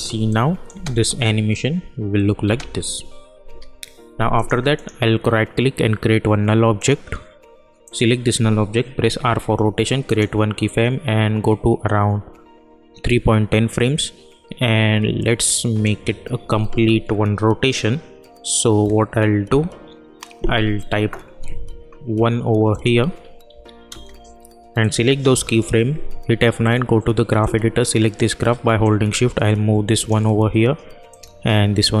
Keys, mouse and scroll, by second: 0.7 space, 3.4 k, 4.3 click, 4.7 right click, 6.7 click, 9.0 r, 10.0 click, 13.0-18.3 drag, 22.7 click, 23.9 Return, 24.8 click, 25.3 F9, 26.6-32.0 drag.